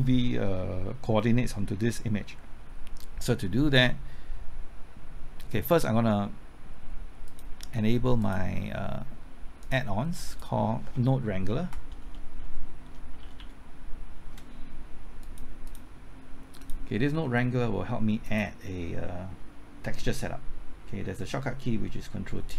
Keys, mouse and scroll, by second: 11.5 typing, 12.9-14.2 typing, 15.2 click.